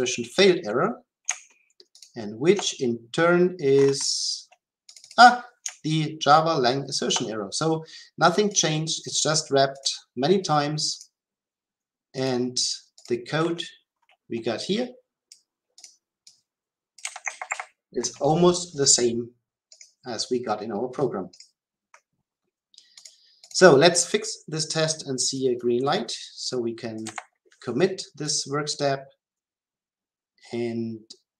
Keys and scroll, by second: 17.0 Delete, 27.0 Delete, 28.2 shift+F10.